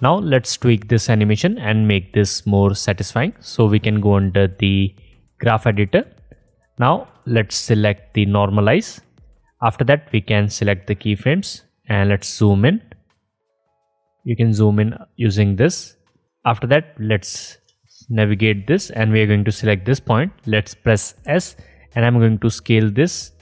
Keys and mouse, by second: 9.0-9.4 drag, 9.5 click, 17.6-18.4 alt+middle drag, 21.2 s.